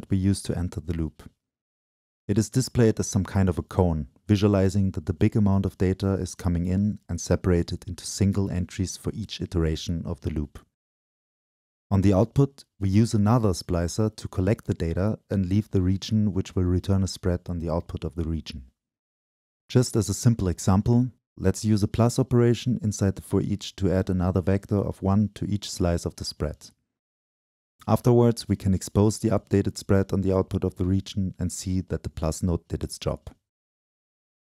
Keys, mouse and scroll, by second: 0.0-1.1 drag, 1.1-3.2 right drag, 4.3-4.9 scroll up 2, 4.9-6.6 scroll up 1, 14.4-16.4 drag, 16.6-18.0 drag, 18.1-18.6 middle drag, 18.6-19.1 drag, 20.3-24.4 drag, 27.2-28.3 drag, 28.3-29.1 middle drag, 29.1-31.5 drag, 31.5-34.2 middle drag.